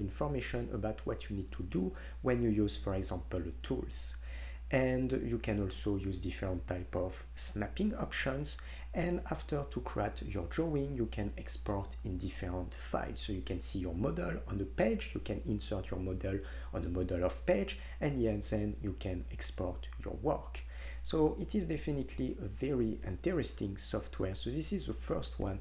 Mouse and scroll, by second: 7.7 middle click, 7.8-16.4 drag, 21.1-23.9 middle drag, 23.9-25.6 drag.